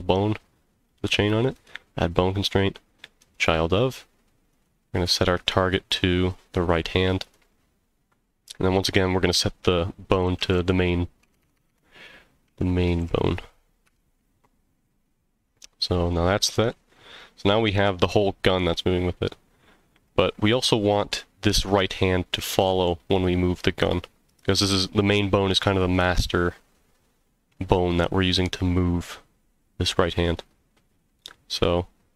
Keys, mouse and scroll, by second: 1.5-3.3 drag, 4.5 click, 8.7-15.3 drag, 11.4 BackSpace, 11.5 BackSpace, 16.0 click, 16.5 g, 20.0 click, 20.0 right click, 22.9 g, 24.3 click, 24.3 right click.